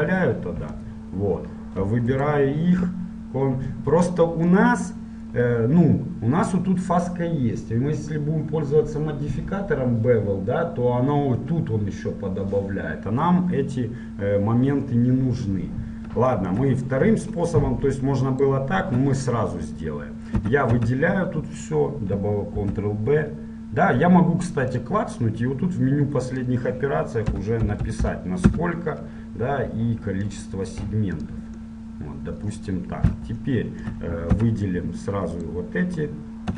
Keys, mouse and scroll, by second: 4.3-6.5 middle drag, 13.7-16.5 middle drag, 18.4-20.7 right drag, 19.1 Tab, 20.7 a, 21.0 a, 21.7-23.9 middle drag, 22.8 ctrl+b, 28.7 KP_0, 30.6 click, 32.0 middle click, 32.1 click, 32.3-33.7 middle drag, 34.5 Tab, 35.5-36.5 right drag.